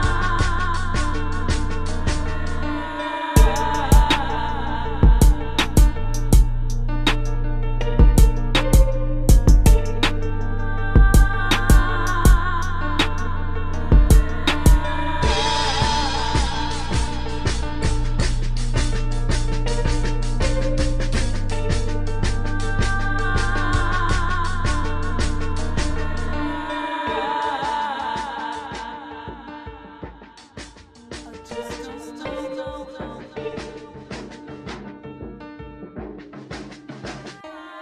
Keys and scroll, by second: 0.0-0.9 typing, 2.4 space, 3.1 space, 3.3 space, 5.7 space, 9.1 space, 11.3 space, 11.9 space, 17.3 space, 17.8 space, 19.8 space, 20.6 space, 25.1 space, 35.5 space, 36.9 space.